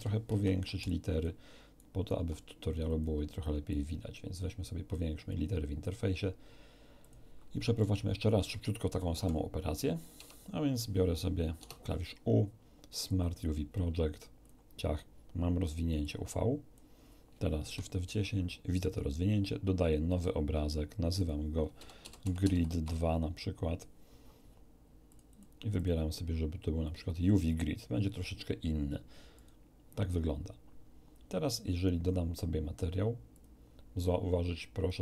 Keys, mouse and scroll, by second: 0.3 ctrl+alt+u, 0.9 ctrl+alt+click, 1.7 ctrl+alt+right click, 2.9 alt+click, 3.7-6.0 alt+drag, 7.0 click, 7.7-8.7 middle drag, 9.1 5, 10.1 Tab, 11.5 u, 13.1 click, 14.4 click, 16.0 click, 17.6 shift+F10, 20.1 click, 21.1 click, 21.7-22.8 typing, 25.1-25.6 drag, 25.7 click, 26.8 click, 29.3 click, 30.1-30.7 scroll down 1, 33.3 click.